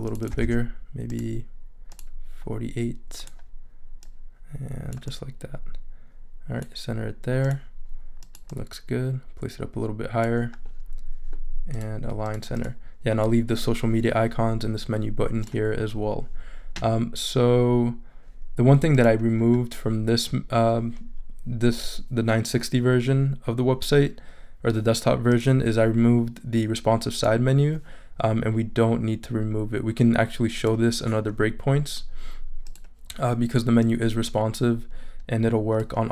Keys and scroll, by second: 0.4 super+a.